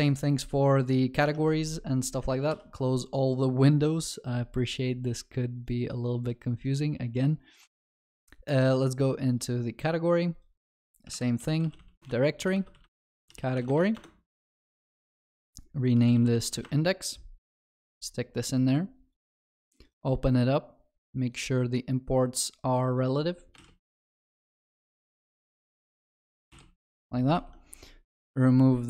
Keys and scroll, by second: 2.6 alt+w, 11.2 alt+Insert, 15.2 shift+F6, 27.4 ctrl+s.